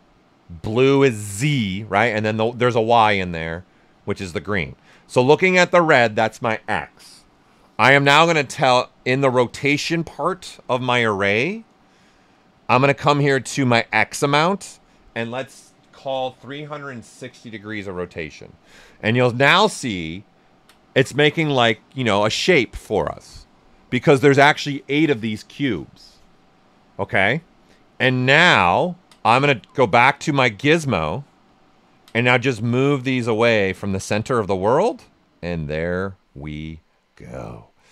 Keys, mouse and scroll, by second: 9.4 click, 14.5 click, 16.2-17.2 typing, 17.5 Return, 18.7 right click, 19.1-23.2 ctrl+right drag, 20.3 typing, 27.7 ctrl+right click, 27.7 typing, 30.1 w, 30.5-32.5 right drag, 32.5-36.7 drag, 36.7 ctrl+right click.